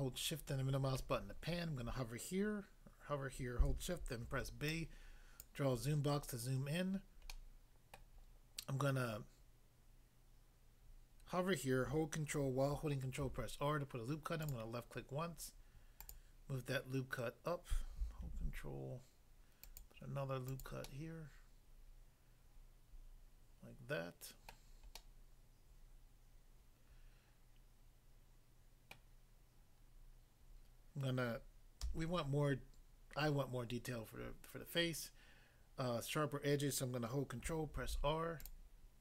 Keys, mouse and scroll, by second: 4.3 b, 4.8 click, 5.4 click, 6.2 scroll up 1, 7.3 middle click, 8.0 middle click, 13.2 ctrl+r, 14.4 click, 16.0 click, 16.1 click, 18.2 ctrl+r, 19.6 click, 19.8 click, 20.5 click, 20.6 click, 20.9 middle click, 24.5 middle click, 25.0 middle click, 28.9 middle click, 31.8 a, 37.8 ctrl+r, 38.4 click, 38.5 click.